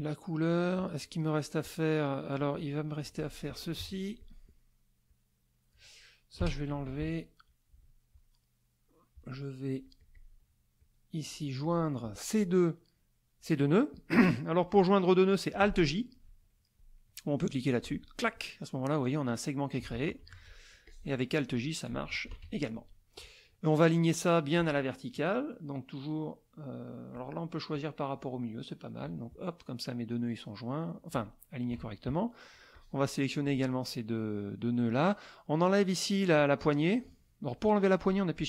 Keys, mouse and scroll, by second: 0.5 click, 1.3 middle click, 2.1 middle click, 3.0 z, 3.2 click, 3.8 F2, 4.2 click, 5.1 click, 6.4 Delete, 6.7 KP_Subtract, 7.5 middle click, 9.8 click, 10.8 click, 11.6 click, 17.4 click, 20.3 ctrl+z, 20.8 ctrl+click, 22.3 alt+j, 27.1 click, 27.7 click, 29.0 click, 29.6 middle click, 30.9 click, 31.7 KP_Subtract, 32.7 click, 36.3 click.